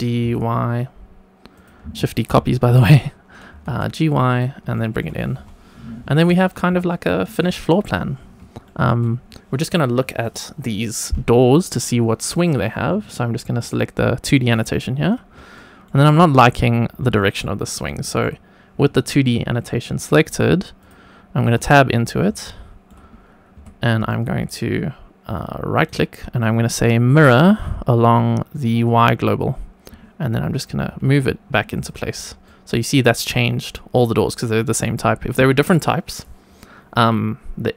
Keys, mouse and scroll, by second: 0.2 y, 1.5 click, 3.5 g, 3.6 y, 4.3 click, 4.7 shift+middle click, 5.3 Tab, 5.6-6.2 scroll down 2, 6.5 scroll up 1, 6.8-7.3 shift+middle drag, 8.6 shift+middle click, 10.2 click, 13.5-14.6 drag, 14.6-15.3 scroll up 1, 15.5-15.8 shift+middle drag, 16.6-17.1 scroll up 2, 17.1 shift+middle drag, 17.6 scroll up 1, 18.0 shift+middle click, 20.7 click, 21.4 Tab, 21.9-22.3 scroll up 2, 22.3 shift+middle click, 23.5 1, 25.7-28.5 right drag, 28.5 click, 30.8 g, 31.0 y, 31.7 click, 32.0-32.4 scroll down 2, 32.4 shift+middle click.